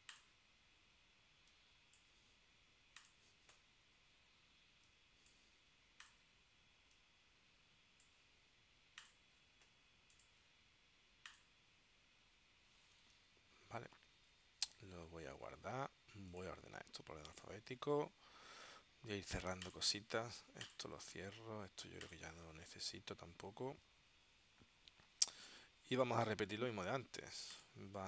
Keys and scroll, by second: 13.3 super+s.